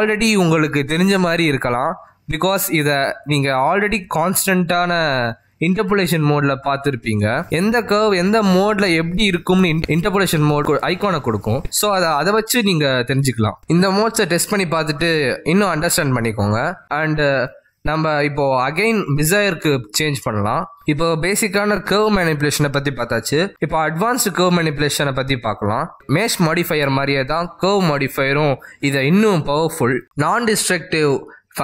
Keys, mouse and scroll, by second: 3.3 click, 15.5 click, 30.8 middle click.